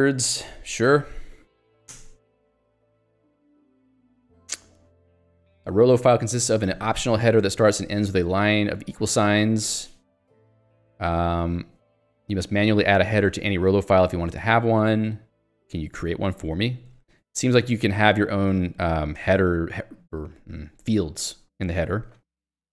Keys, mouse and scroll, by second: 0.1 j, 1.3 l, 2.0 Return, 2.7 j, 13.8 q, 14.1 Escape, 14.8 j, 16.9 k, 19.2 shift+v.